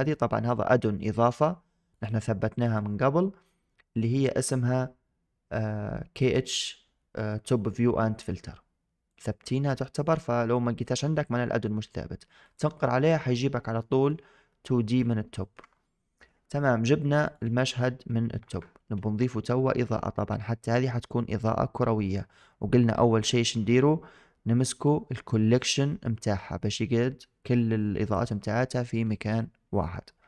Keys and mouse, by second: 2.0-2.7 drag, 13.7 shift+middle drag, 15.2 shift+middle click, 24.6 click.